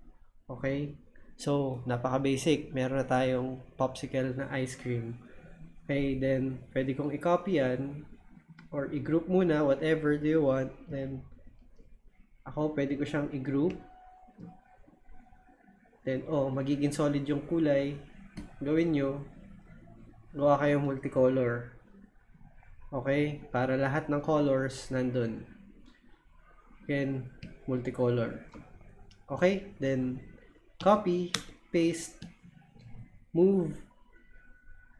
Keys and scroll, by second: 30.8 super+c, 31.3 super+v.